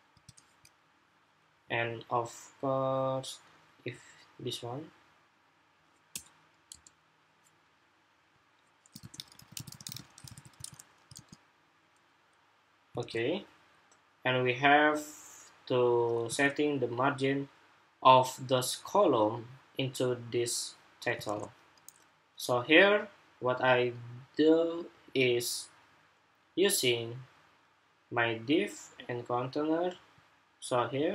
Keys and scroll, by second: 10.0 super+s, 10.4 super+Tab, 10.9 super+r, 12.7 super+Tab, 16.0 super+Tab, 21.4 super+Tab.